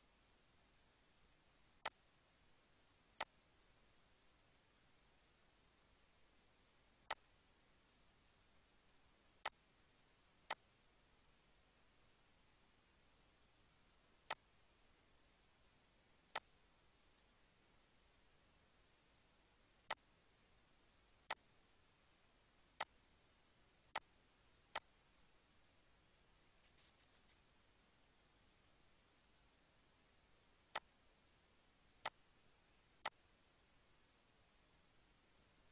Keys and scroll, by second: 26.3 ctrl+s.